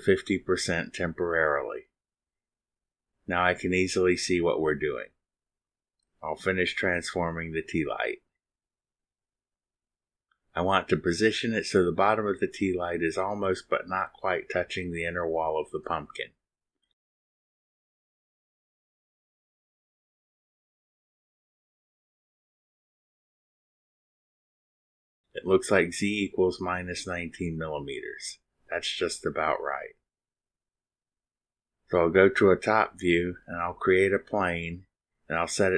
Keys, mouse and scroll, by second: 0.4 click, 1.4 click, 2.0-2.4 scroll up 2, 3.2 scroll up 1, 5.1 click, 7.8 right click, 9.3 click, 10.3-12.9 drag, 13.2-14.6 drag, 14.8-18.8 drag, 18.9 scroll up 1, 22.0 click, 25.5 middle click, 26.4 click, 27.1 click, 28.2 click, 31.3-31.7 scroll up 2, 31.7 middle click, 32.6 click, 33.1 click, 34.6 click.